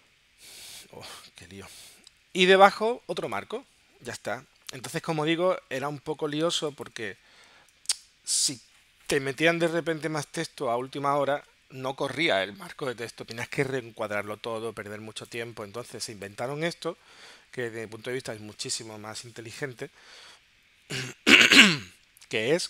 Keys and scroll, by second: 6.5 space, 7.9 BackSpace, 15.7 space.